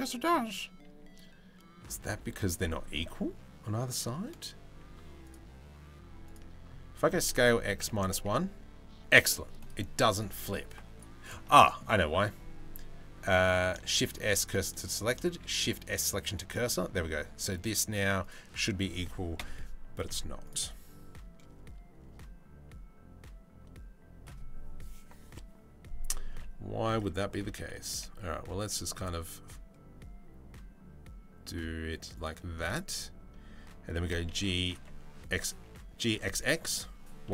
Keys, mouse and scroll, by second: 4.4 Tab, 4.8 click, 5.8 click, 6.6 s, 9.7 click, 10.5-11.4 middle drag, 13.4 shift+s, 14.9 shift+s, 16.2 middle drag, 17.0 middle click, 19.0 KP_7, 19.6 z, 25.9 g, 26.7 Tab, 26.9 a, 27.5 g, 33.5 g.